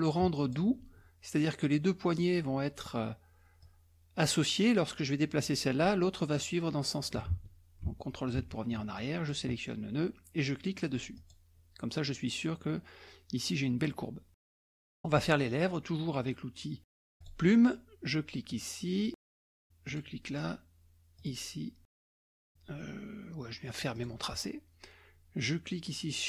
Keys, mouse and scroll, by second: 1.6 click, 3.6-5.8 drag, 6.3 click, 7.4 ctrl+z, 7.9 ctrl+z, 8.4 ctrl+z, 9.0 ctrl+click, 11.2 click, 14.5 scroll down 1, 14.7-15.8 scroll up 2, 17.2 click, 18.5-19.5 drag, 19.9 click, 21.2 click, 23.9 click.